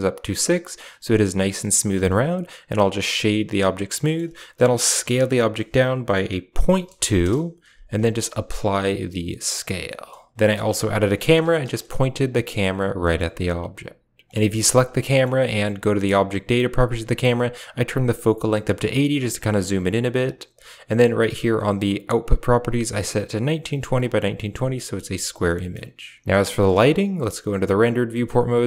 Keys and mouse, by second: 1.3 click, 1.8 w, 3.9 middle click, 6.4 s, 8.3 ctrl+a, 9.8 shift+middle drag, 10.3 alt+h, 10.3 a, 10.4 click, 10.7 g, 11.6 KP_0, 12.9 shift+middle drag, 14.3 g, 15.1 shift+middle click, 17.9 click, 24.7 shift+middle click, 25.4 middle drag, 26.4 shift+middle drag, 26.8 z, 28.3 right drag.